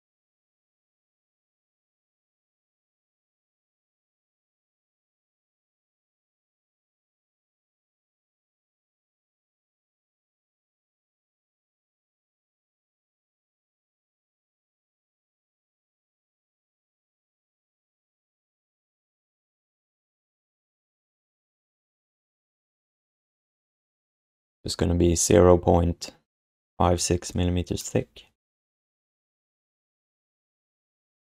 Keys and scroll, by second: 0.4 ctrl+w, 3.3 ctrl+z, 3.5 ctrl+z, 3.7 ctrl+z, 3.9 ctrl+z, 4.0 ctrl+z, 4.4 ctrl+z, 4.9 ctrl+z, 5.3 q, 6.4 w, 7.8 r, 12.4 q, 13.6 r, 15.6 q, 16.2 alt+shift+d, 17.7 space, 18.1 space, 18.6 f, 30.1 q.